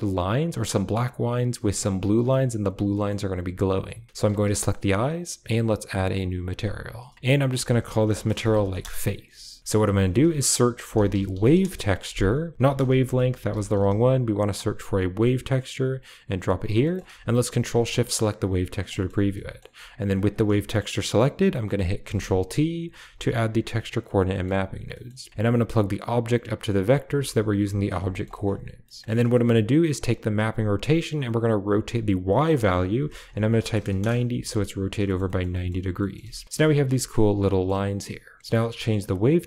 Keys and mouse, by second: 2.8 shift+middle click, 4.2 g, 5.4 click, 7.3-8.7 drag, 10.0 shift+a, 12.5-13.4 typing, 16.7 click, 17.4 ctrl+shift+click, 17.7 click, 18.5 click, 18.9 shift+middle click, 19.3 shift+middle click, 20.0 click, 20.3 middle click, 20.9 middle click, 23.0 ctrl+t, 24.8 middle click, 25.6 a, 25.9-26.4 drag, 26.7 click, 27.0 b, 27.4 g, 27.8 a, 28.0 click, 29.2 click, 29.8 click, 30.9-31.9 drag, 32.1-33.9 drag, 35.2 middle click, 35.5 shift+middle click, 36.4 ctrl+middle click, 36.9 shift+middle click, 37.3 middle drag, 37.9 click.